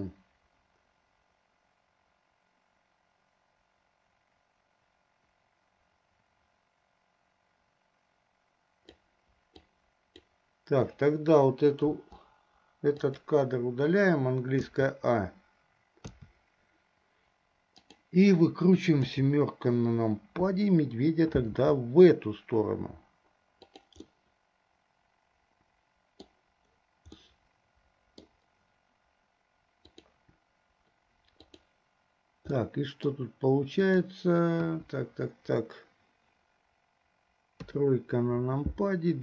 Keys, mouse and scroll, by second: 0.4-9.4 drag, 10.0 click, 12.1 Delete, 13.4 drag, 15.1 a, 16.5 a, 18.0 click, 19.4 KP_7, 21.6 r, 24.3-26.6 middle drag, 27.4-28.6 middle drag, 30.0 click, 32.9 middle click, 34.1 click, 34.8 KP_1, 37.7 KP_3.